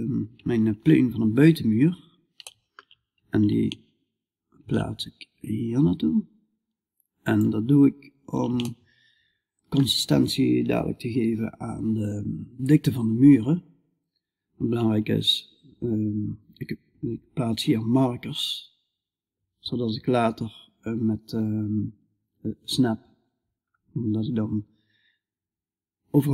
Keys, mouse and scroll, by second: 7.2 middle click, 8.7-26.3 middle drag.